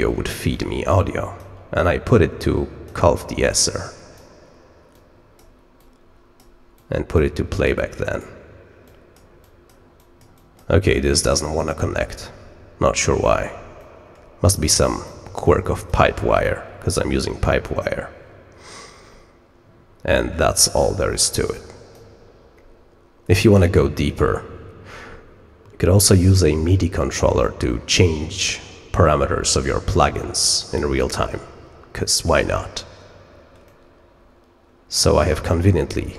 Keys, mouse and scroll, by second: 0.5 click, 1.8-2.8 drag, 3.4 click, 4.9 click, 5.7 click, 6.7 click, 7.7 click, 8.8 click, 9.3 click, 9.9 click, 10.3 click, 13.7 middle click, 14.6 click, 15.4 click, 20.1 click, 21.4 click, 33.6-34.9 middle drag, 33.6-34.9 scroll, 34.9-35.3 scroll up 2, 35.3 middle click.